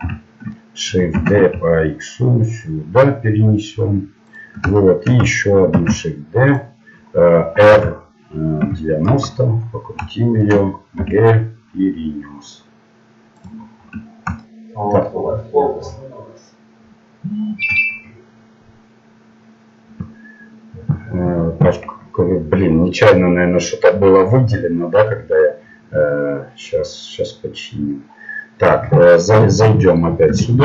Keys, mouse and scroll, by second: 0.0 z, 1.1 shift+d, 4.8 middle click, 5.8 shift+d, 7.7 r, 9.6-12.0 middle drag, 11.0 g, 13.6-18.2 middle drag, 29.5 right click, 30.3 Tab.